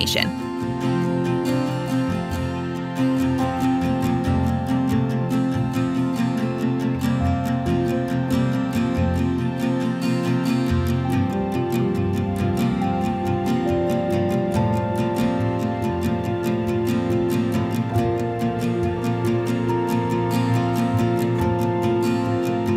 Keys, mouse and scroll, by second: 1.2 click, 2.8-7.9 typing, 5.2 click, 8.2-13.3 right drag, 13.7 click, 15.0 click, 15.8-17.5 typing, 18.2 click, 22.1 click.